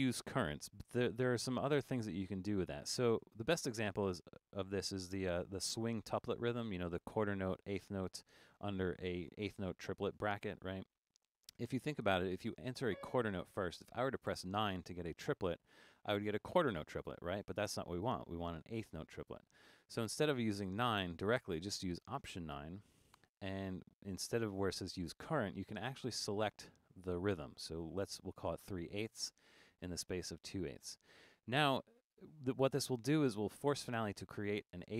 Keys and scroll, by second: 3.3 5, 22.5 alt+9.